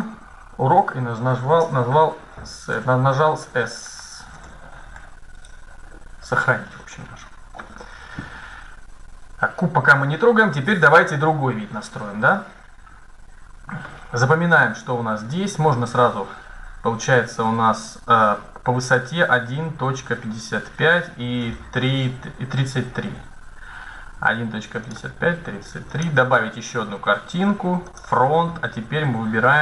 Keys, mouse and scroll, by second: 2.2-7.5 middle drag, 13.6-15.7 middle drag, 24.6-27.4 drag, 27.6-29.4 drag.